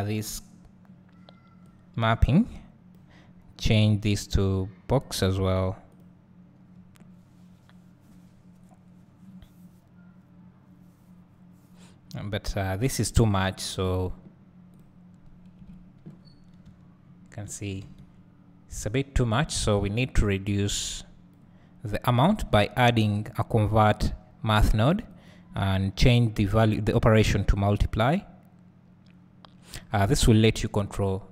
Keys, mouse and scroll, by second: 15.6 KP_Decimal, 16.2 scroll up 1, 16.9 `, 18.7-19.6 scroll up 1, 21.0-25.5 drag, 27.3-31.3 drag.